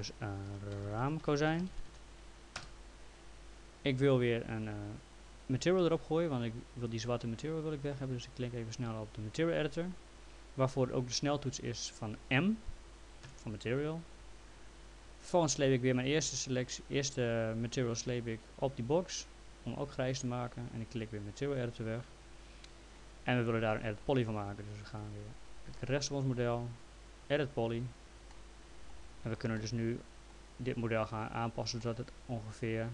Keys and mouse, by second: 0.3-2.4 typing, 2.6 Return, 13.2 m, 17.9 click, 21.6 click, 25.0 right click, 27.5 click, 28.3 alt+middle click, 29.5 alt+middle click, 31.8 alt+middle click.